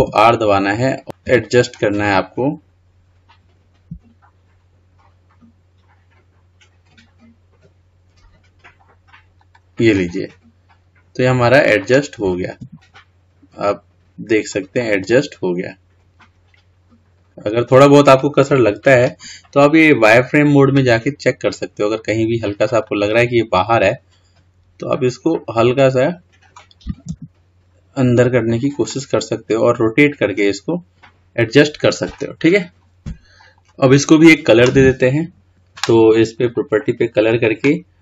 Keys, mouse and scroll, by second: 10.3-13.0 middle drag, 13.0 g, 15.2-18.2 middle drag, 22.3 drag, 23.2-26.4 middle drag, 28.2 g, 29.2-32.7 middle drag, 32.7 scroll down 3, 33.0 KP_1, 36.8-38.0 drag.